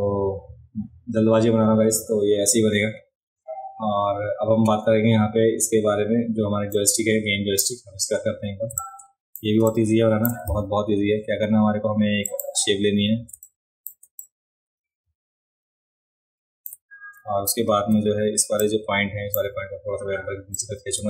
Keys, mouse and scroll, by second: 6.7 click, 8.7 space, 8.7 click, 9.7 click, 12.3 click, 13.3 space, 13.4 click, 14.2-16.6 drag, 18.6 click, 20.5-21.0 drag.